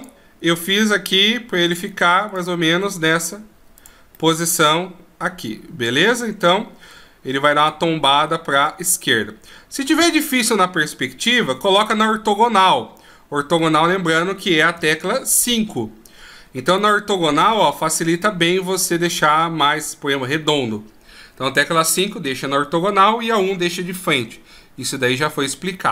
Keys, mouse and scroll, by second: 0.2 right click, 0.9 r, 2.5 right click, 3.0 r, 4.4 middle click, 7.9 right click, 8.4 r, 11.8 KP_5, 15.0 KP_1, 17.0 right click, 17.9 r.